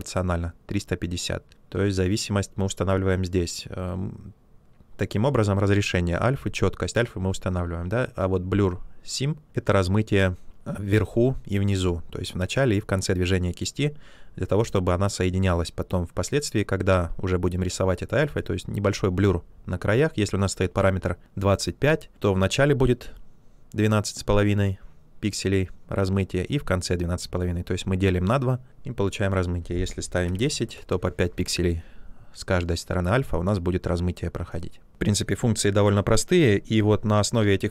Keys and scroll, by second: 30.0-30.8 typing.